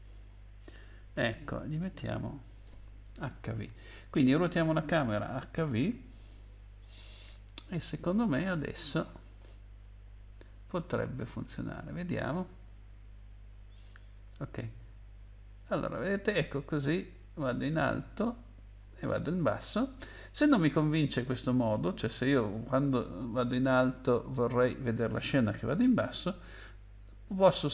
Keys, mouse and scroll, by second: 1.8 click, 2.6 BackSpace, 5.5 ctrl+s, 8.1-8.6 scroll up 8, 11.6 click, 26.3 click, 27.6 click.